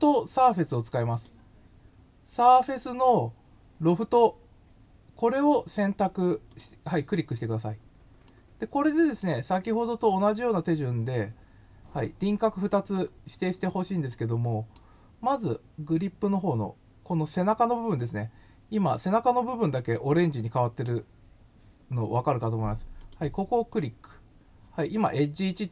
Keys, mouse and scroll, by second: 1.1 click, 6.5 click, 8.2 middle click, 12.7-13.1 scroll down 2, 13.6 scroll down 1, 14.1 middle click, 22.9 click.